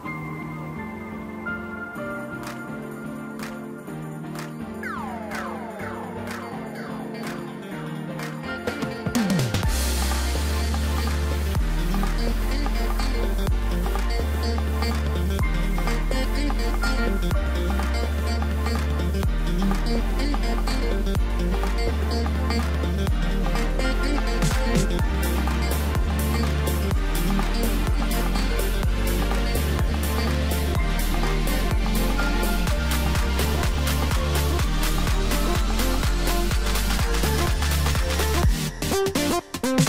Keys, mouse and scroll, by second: 1.2 click, 1.7-4.7 drag, 6.9 click, 8.3-11.0 drag, 11.0-12.7 middle drag, 12.7 drag, 13.1-13.9 scroll down 4, 13.9 click, 14.3-14.8 middle drag, 14.8-15.1 scroll up 1, 15.1-16.4 middle drag, 16.4-18.8 drag, 19.1-22.1 middle drag, 25.7 click, 27.8-29.7 drag, 30.1-31.1 drag, 31.1-31.5 scroll down 3, 31.5-33.6 middle drag, 33.6-34.9 drag, 34.9-37.2 middle drag, 37.2 click, 37.9-39.8 middle drag.